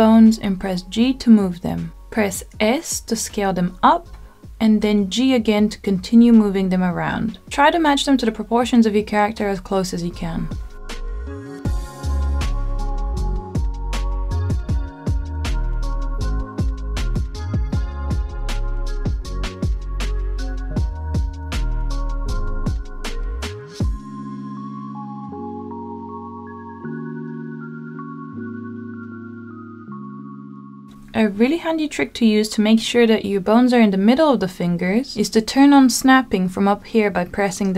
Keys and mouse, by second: 1.0 g, 2.1 click, 2.5 middle click, 3.2 shift+middle click, 4.8 s, 6.4 g, 8.0-9.4 middle drag, 9.7 g, 10.3 y, 11.8 click, 13.1-14.1 drag, 15.2 g, 15.6 y, 17.5 g, 17.9 y, 19.5 click, 20.1 click, 21.4 g, 22.4 click, 22.9 middle click, 24.0 shift+middle click, 26.5 g, 29.7 click, 30.5 middle click, 35.4-37.7 drag.